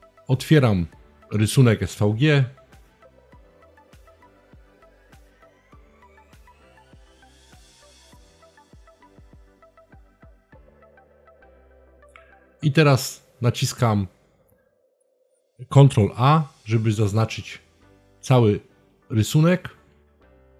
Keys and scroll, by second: 15.2 super+a.